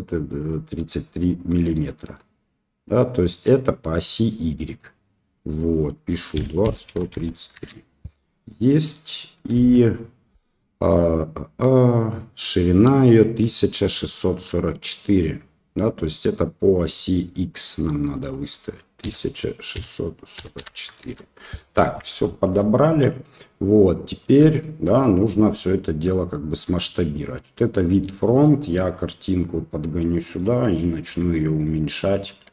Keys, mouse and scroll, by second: 2.1-3.0 middle drag, 4.6-8.1 drag, 7.1 KP_3, 8.5 click, 9.5 KP_1, 18.2-21.7 drag, 20.5 KP_4, 22.3 shift+click, 27.5 click, 28.4 click, 29.1-30.5 right drag, 31.1 s.